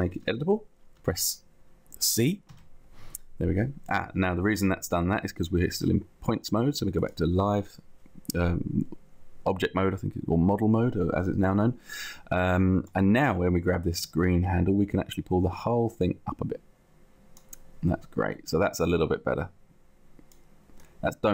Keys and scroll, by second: 2.6 c.